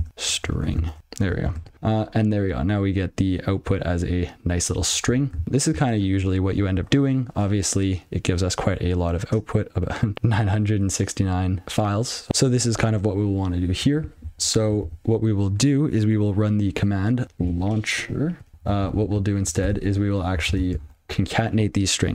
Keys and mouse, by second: 0.0-1.8 typing, 5.4 ctrl+p, 6.6 ctrl+n, 11.6 click, 14.5 ctrl+b, 17.3 a, 18.1 u, 19.4 ctrl+alt+b, 20.1 ctrl+d, 21.3 (.